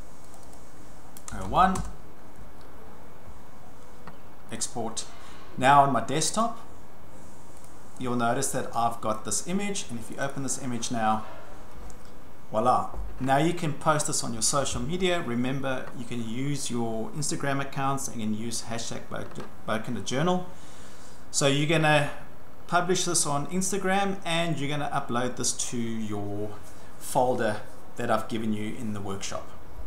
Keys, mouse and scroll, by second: 0.3 click, 0.6 click, 1.1-2.0 typing, 4.6 click, 6.5 click, 7.6 click, 9.1 click, 10.1 click, 10.3 click.